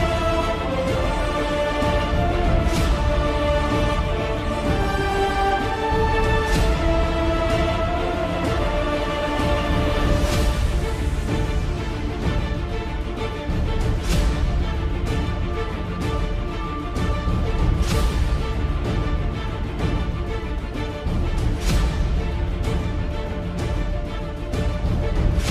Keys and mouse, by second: 7.7 s, 9.9 ., 11.7 s, 17.8 middle click, 20.2 s, 23.0 middle click, 25.1 Tab.